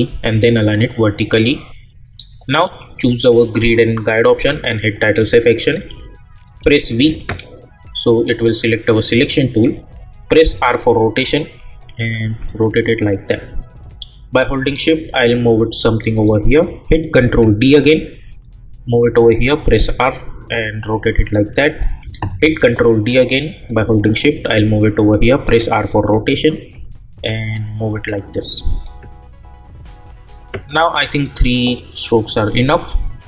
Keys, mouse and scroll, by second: 3.6 click, 6.6 v, 10.5 r, 11.8-17.2 drag, 17.2 ctrl+d, 17.7-19.7 drag, 19.7 r, 20.7-22.4 drag, 22.4 ctrl+d, 23.7-25.4 drag, 25.4 r, 26.5-31.2 drag.